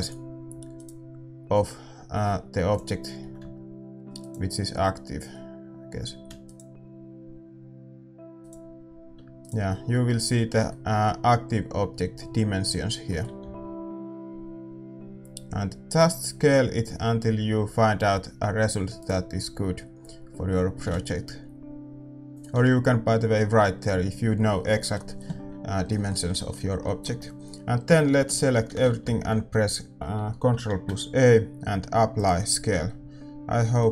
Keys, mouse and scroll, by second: 0.8-2.5 right drag, 0.8 a, 2.5 a, 2.6-3.9 right drag, 3.9-6.4 middle drag, 3.9 s, 6.4-13.0 right drag, 13.0-15.1 middle drag, 15.1 s.